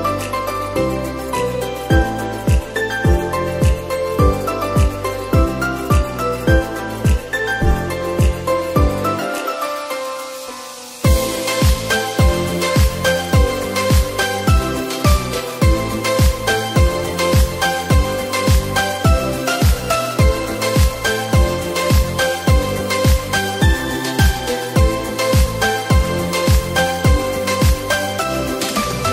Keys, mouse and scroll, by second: 4.5-7.1 scroll down 6, 7.1-7.6 scroll down 1, 7.6-10.0 scroll down 1, 10.3-13.6 drag, 15.7 click, 17.6-20.2 drag, 21.4 click, 22.8-25.9 drag, 26.1 click, 28.8 click.